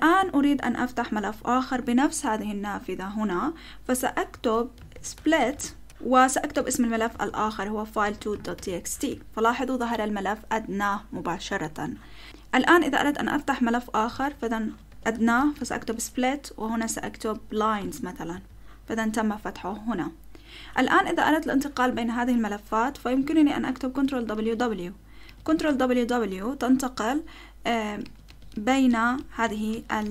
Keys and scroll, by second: 4.1-9.1 typing, 14.2-16.1 typing, 17.4-18.3 typing, 18.3 Return, 24.1 ctrl+w, 24.4 ctrl+w, 25.2 ctrl+w, 25.5 ctrl+w, 28.0 ctrl+w, 28.3 ctrl+w, 28.5 ctrl+w, 28.9 ctrl+w, 29.7 ctrl+w, 30.0 ctrl+w.